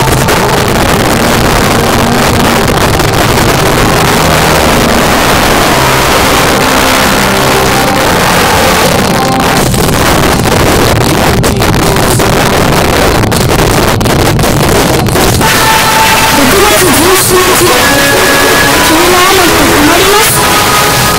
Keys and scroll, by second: 21.1 space.